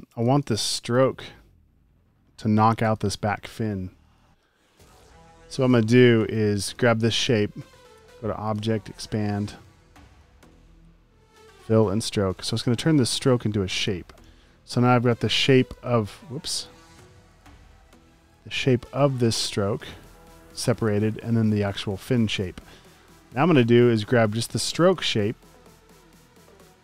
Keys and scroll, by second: 0.4 alt+super+space, 4.6 super+z, 4.9-6.3 typing, 14.2 a, 15.8 super+z, 16.4 space, 18.9 space, 19.6 space, 19.8 space, 20.0 space, 20.3 super+z, 21.9 space, 22.4 space, 25.8 space, 26.0 space.